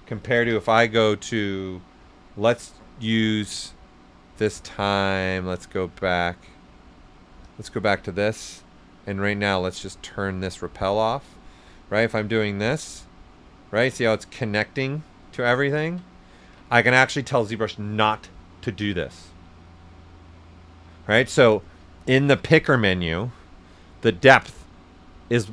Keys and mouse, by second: 0.5 b, 3.5 c, 7.4 click, 10.9 right click, 11.9 click, 12.7-15.2 right drag, 16.1 right click, 16.4 ctrl+z, 16.7 shift+right click, 22.4 click.